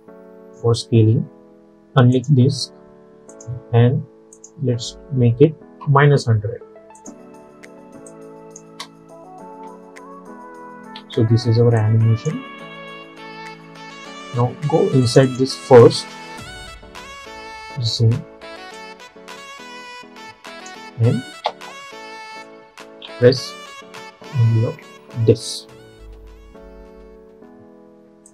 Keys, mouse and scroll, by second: 2.2 click, 5.9 -, 7.1 click, 8.8 space, 11.0 space, 11.9-15.1 drag, 18.4 =, 18.8-21.5 drag, 21.5 ctrl+a, 24.9 alt+], 26.6 =, 26.9 =.